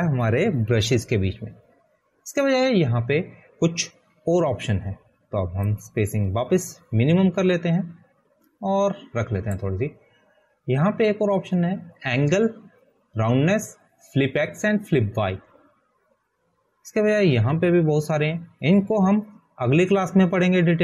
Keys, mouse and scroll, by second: 8.1 click.